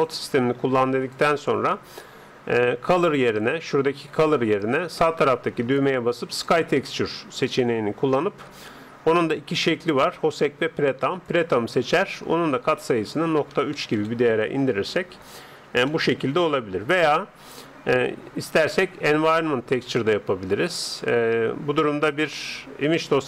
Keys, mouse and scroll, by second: 3.3 Escape, 4.6-6.5 drag, 9.8-11.7 drag, 12.8-14.6 drag, 15.2-17.7 middle drag, 18.5-20.4 drag, 23.1 click.